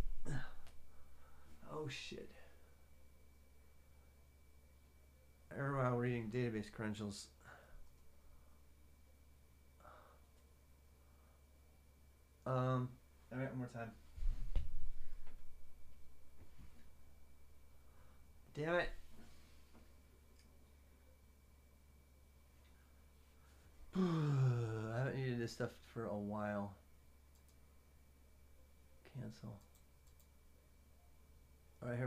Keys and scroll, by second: 0.0-32.0 typing.